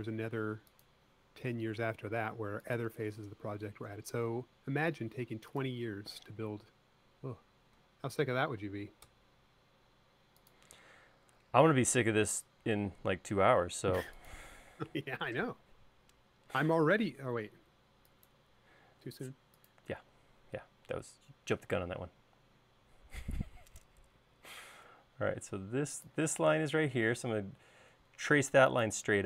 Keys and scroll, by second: 3.6 e, 4.9 l, 20.9 l.